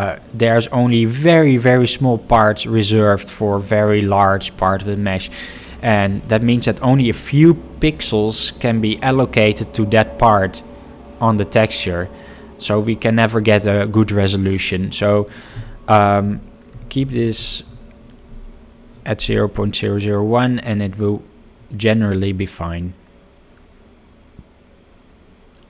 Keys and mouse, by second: 7.1 middle drag, 15.2-25.6 drag, 17.1 0.